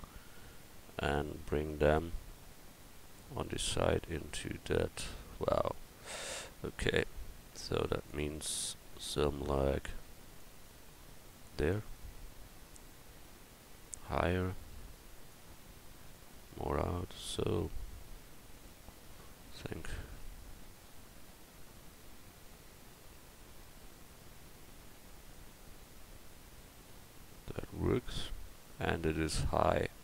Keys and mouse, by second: 6.3 middle click, 6.5 middle click, 7.8 right click, 7.9-8.5 drag, 8.3 right drag, 8.7-9.6 drag, 8.7-9.6 right drag, 9.6-10.7 middle drag, 10.7-11.9 drag, 11.9-14.2 middle drag, 14.2-17.6 drag, 17.6 middle click, 18.4 middle click, 25.5-30.0 middle drag.